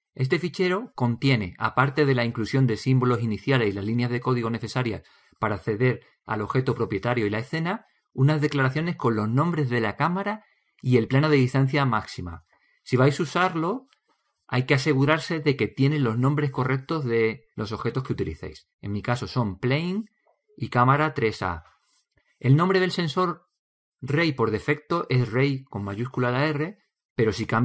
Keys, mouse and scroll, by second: 3.2-4.3 middle drag, 4.7-9.8 drag, 13.0-23.2 drag.